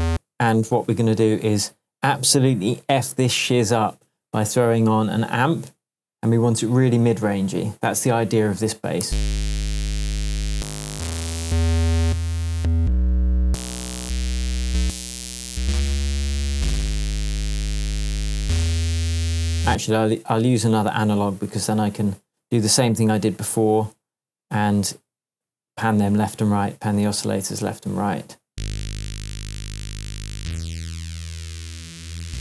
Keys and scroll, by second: 0.1 space, 9.0 space, 19.6 space, 28.5 space.